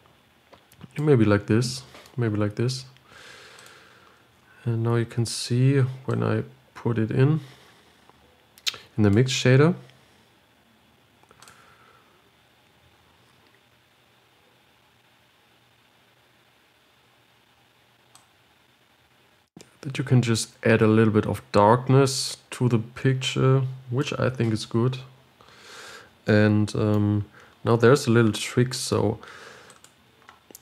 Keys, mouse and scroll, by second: 12.4 Left, 18.6-21.5 drag, 25.1-25.6 scroll down 1, 25.6 scroll down 1, 25.9-26.6 scroll up 3, 30.0-30.6 drag.